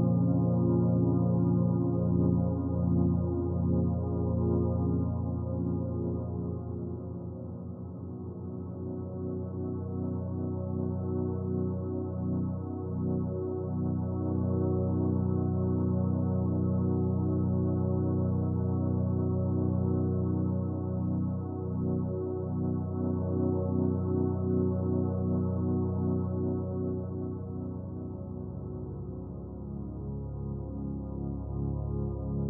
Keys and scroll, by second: 11.1 typing, 11.5 Return, 23.6-24.0 typing, 29.3 typing, 32.2 typing.